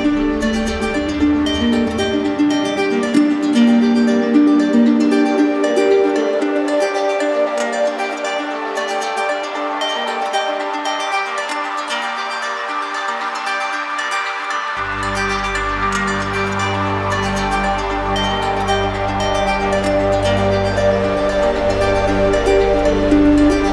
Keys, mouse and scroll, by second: 0.6 shift+click, 0.9 shift+click, 1.4 alt+right click, 4.5 click, 6.0 right click, 8.9 click, 9.4 right click, 9.7 ctrl+z, 12.4 alt+click, 13.0 ctrl+z, 15.9 alt+click, 18.2 shift+click, 18.8 right click, 21.0 right click, 21.7 right click, 22.7 shift+click, 23.2 shift+click, 23.4 shift+click.